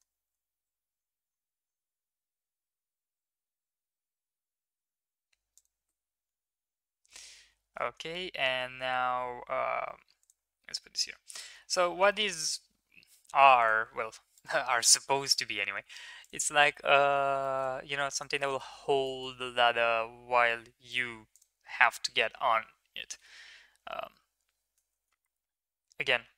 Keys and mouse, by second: 6.2 Tab, 7.4 g, 10.7-11.1 middle drag, 11.5 middle click, 12.2-12.7 shift+middle drag, 13.6 click, 14.4 right click, 16.2 click, 16.5 shift+middle click, 16.7 middle click, 17.4 shift+middle drag, 18.1 click, 18.4 shift+middle drag, 19.0 middle click, 19.7 middle click, 20.9 right click, 22.9 g.